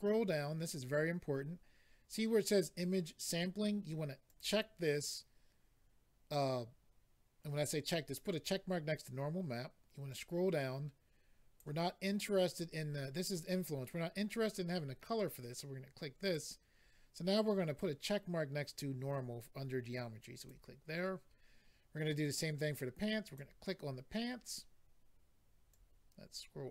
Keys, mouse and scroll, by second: 4.2 click, 4.4 click, 10.1 click, 16.2 click, 16.3 click, 20.3 click, 20.4 click, 23.2 click, 23.3 click, 25.7 click.